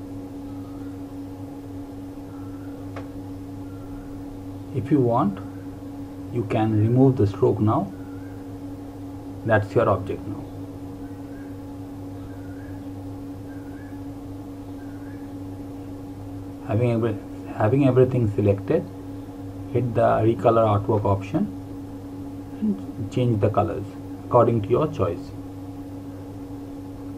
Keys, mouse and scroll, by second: 12.9 click, 22.9 click.